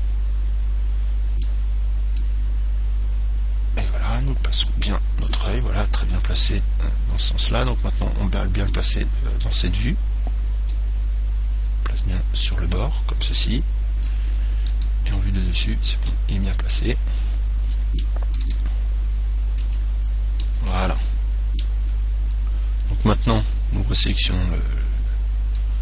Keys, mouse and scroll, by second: 0.1 click, 2.4 click, 6.6 KP_1, 11.0 click, 14.9 KP_7, 16.3-18.8 middle drag, 18.8 Tab, 19.9 z, 20.7-23.4 middle drag, 23.5 right click.